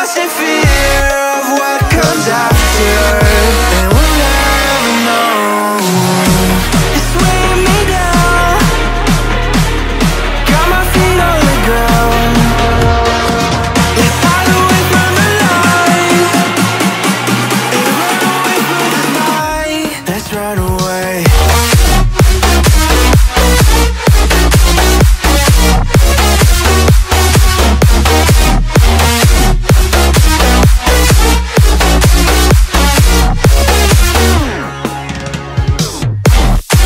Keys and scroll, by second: 21.0 space, 25.8 space.